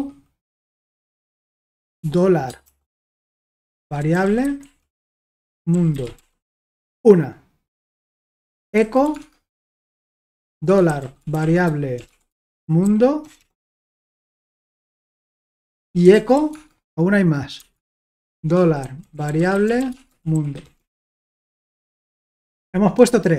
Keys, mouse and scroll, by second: 0.0-0.4 typing, 2.0-7.0 typing, 8.2 Return, 8.3-16.8 typing, 18.1-21.2 typing, 22.5 Escape, 22.9 k, 23.2 k.